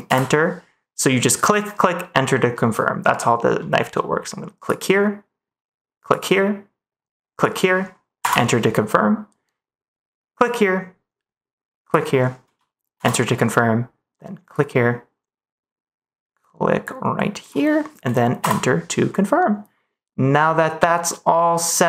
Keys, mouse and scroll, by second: 4.5-8.2 drag, 10.3-12.9 drag, 14.4-18.3 drag.